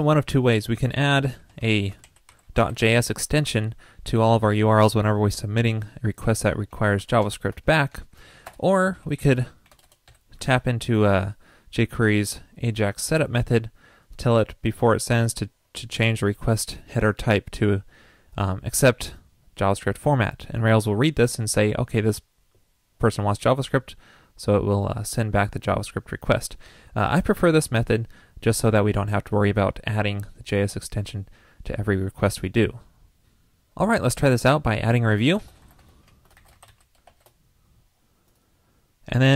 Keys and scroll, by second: 7.0 alt+shift+Left, 7.2 alt+shift+Left, 9.0 super+Up, 10.5 super+v.